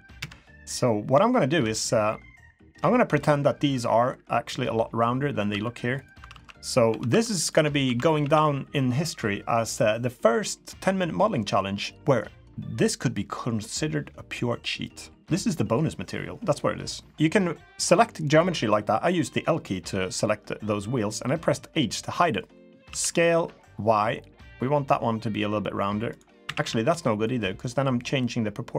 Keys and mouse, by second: 0.2 KP_3, 1.3 shift+middle drag, 2.9 shift+middle drag, 5.5 1, 6.0 click, 6.3 alt+z, 6.9 1, 7.1 1, 7.4 click, 7.5 Tab, 7.8 1, 8.2 a, 14.8 click, 22.7 b, 22.9 s, 26.4 a, 26.6 a, 26.9 b.